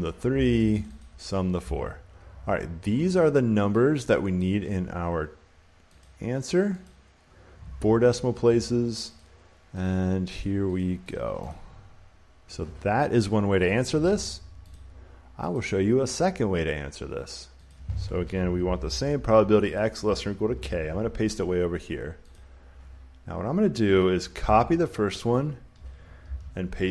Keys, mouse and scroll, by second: 0.2 Escape, 0.7 click, 0.9 click, 1.6 Escape, 4.3 click, 5.9 click, 6.8 click, 9.1 click, 9.7 click, 10.3 click, 10.7 click, 11.0 click, 11.4 click, 14.6 click, 15.4 click, 17.6 click, 18.5 ctrl+c, 19.7 click, 20.4 ctrl+v, 22.2 click, 24.3 ctrl+c, 25.2 click, 26.1 ctrl+v.